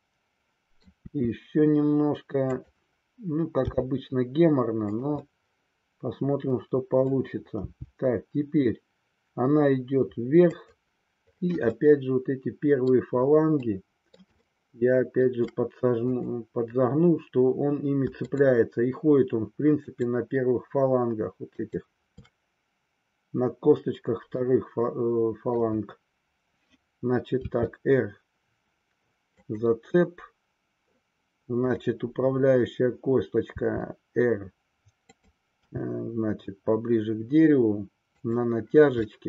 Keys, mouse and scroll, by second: 1.1 r, 2.6 click, 3.7 g, 5.4-7.3 middle drag, 7.7 g, 10.8 click, 11.9-13.0 middle drag, 13.7-14.4 middle drag, 14.5 scroll up 1, 14.6-15.4 shift+middle drag, 15.4 scroll down 1, 16.2-17.5 drag, 18.4-19.6 shift+drag, 19.9-21.3 shift+drag, 21.6-23.3 shift+drag, 24.5-25.6 middle drag, 27.4 r, 31.6-33.0 drag, 33.6 r, 35.2 click, 35.8 g, 38.3 click, 39.1-39.2 middle drag.